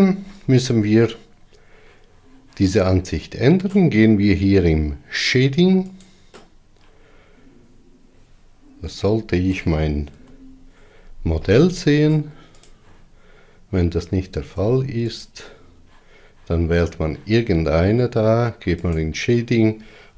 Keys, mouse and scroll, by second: 6.8 click, 13.4 click, 15.3 Tab, 16.1 click, 19.7 click.